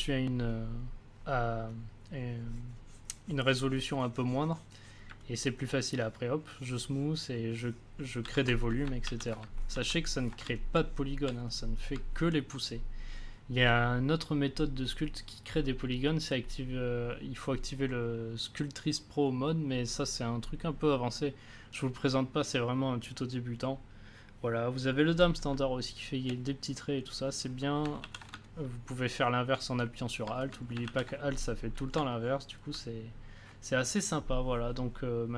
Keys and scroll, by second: 8.2 a, 9.0 ctrl+z, 9.7 ctrl+z, 25.5 space, 28.0 ctrl+z, 30.8 ctrl+z.